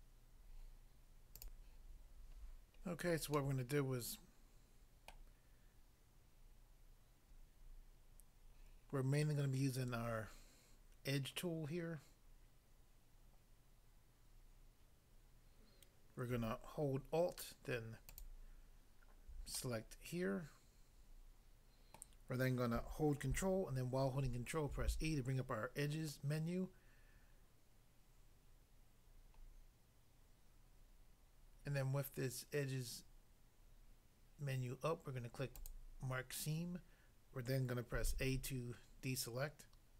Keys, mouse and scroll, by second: 1.4 click, 2.5 scroll down 1, 3.4 middle click, 5.1 middle click, 18.1 alt+click, 19.5 middle click, 22.0 middle click, 24.7 ctrl+e, 35.5 click, 38.1 a.